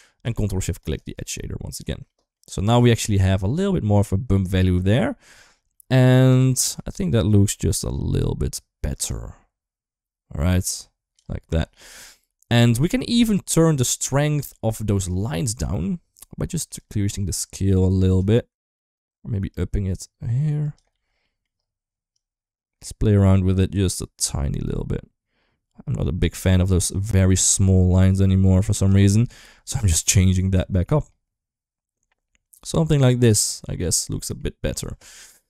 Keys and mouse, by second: 0.7 ctrl+shift+click, 1.9 shift+middle click, 2.5 shift+middle drag, 5.5 shift+middle click, 6.2 shift+middle click, 8.9-11.0 drag, 11.7 shift+middle click, 12.7 shift+middle click, 15.1 shift+middle click, 16.6-18.0 shift+drag, 18.5 ctrl+z, 19.3-20.5 drag, 20.7 ctrl+z, 21.0 middle click, 21.9-28.7 drag, 29.3 middle click, 30.1-33.6 drag, 33.9 middle click.